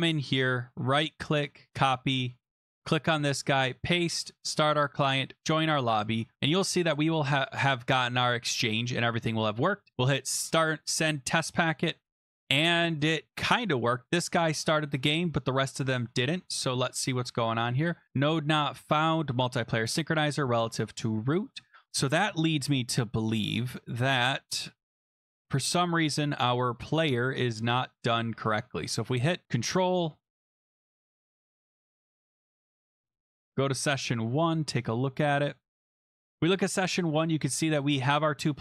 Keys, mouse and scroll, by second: 0.3 click, 0.5 click, 0.7 right click, 1.7 click, 2.3 click, 2.7 click, 3.1 click, 3.4 ctrl+v, 4.3 click, 5.4 click, 6.9 click, 9.1 click, 10.3 click, 11.8 click, 13.9 click, 15.2 click, 16.1 click, 16.5-17.2 scroll down 21, 24.9 click, 26.2 click, 26.8 click, 27.3 click, 29.5 click, 29.5-30.4 scroll down 5, 30.4 click, 31.0 click, 32.3 scroll, 32.8-33.3 scroll, 33.3 scroll down 9, 33.3 click, 33.9 click, 34.1-34.8 scroll, 35.9 click, 36.0 click, 36.3 click, 37.0 click, 37.4-38.2 scroll.